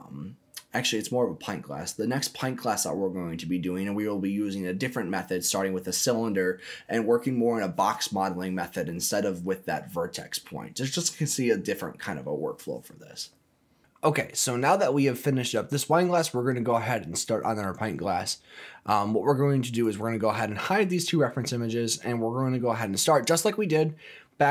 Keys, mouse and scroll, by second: 19.6 click, 20.4 click, 23.0 click, 24.1-24.5 scroll up 2.